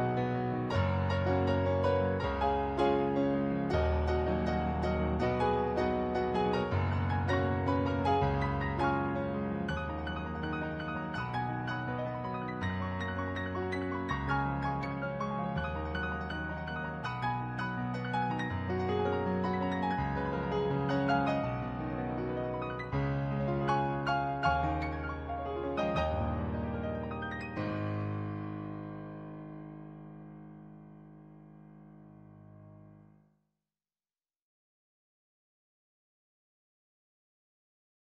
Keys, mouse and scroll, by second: 1.4 ctrl+z, 3.2 ctrl+z, 4.1 ctrl+z, 4.8 ctrl+z, 9.9 ctrl+z, 10.9 ctrl+z, 15.3 ctrl+z, 15.7 ctrl+z, 16.7 ctrl+z, 17.1 ctrl+z, 18.1 ctrl+z, 18.6 ctrl+z, 21.4 ctrl+z, 22.0 ctrl+z, 22.7 ctrl+z, 24.1 ctrl+z, 25.0 ctrl+z, 27.2 click, 28.1 ctrl+z, 28.9 ctrl+z, 29.3 ctrl+z, 29.9 ctrl+z, 31.1 ctrl+z, 32.6 ctrl+z, 33.1 ctrl+z, 33.8 ctrl+z, 34.3 ctrl+z, 35.1 ctrl+z, 35.9 ctrl+z, 36.5 ctrl+z, 36.9 ctrl+z, 37.7 ctrl+z.